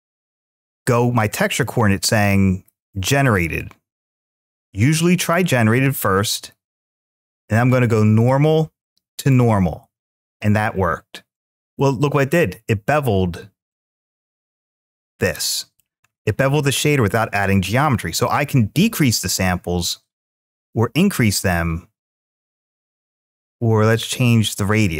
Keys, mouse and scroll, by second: 0.7-1.8 drag, 3.4-5.8 drag, 7.5-9.8 drag, 11.7-14.0 middle drag, 15.2-16.0 middle drag, 18.0-24.9 drag.